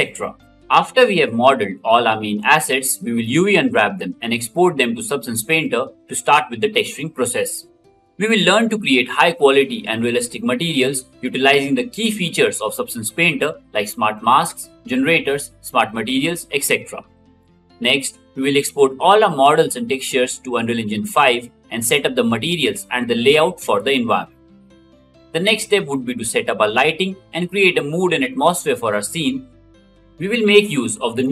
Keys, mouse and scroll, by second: 21.5 ctrl+z, 24.5 g.